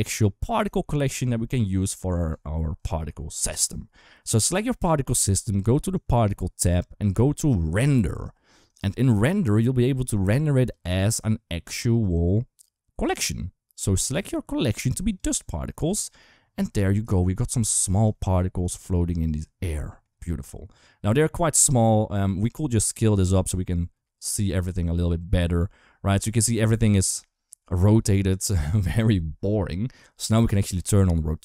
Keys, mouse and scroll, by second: 0.7-1.0 shift+middle drag, 1.6 click, 2.6 click, 8.5 drag, 10.3-12.9 drag, 13.9-15.0 drag, 15.8 KP_1, 16.9 shift+middle drag, 17.9 shift+middle drag, 18.4 click, 19.5-19.8 shift+middle drag, 22.3 shift+middle click, 23.6-26.1 shift+drag, 26.7 shift+middle drag, 31.2 click.